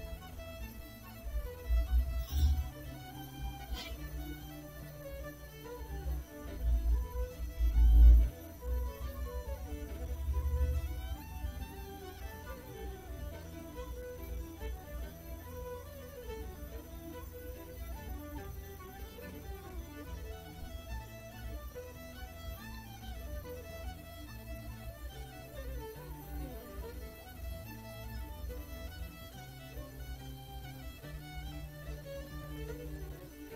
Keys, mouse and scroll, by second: 0.5 right click, 7.9 click, 9.3 click, 10.4 click, 11.9 click, 12.9 click, 15.0-18.1 drag, 19.0-20.0 drag, 20.7-21.7 drag, 22.0 click, 22.4 middle click, 24.9 click, 26.2-27.4 drag, 27.9-30.7 drag, 31.0 click, 32.3-33.3 drag.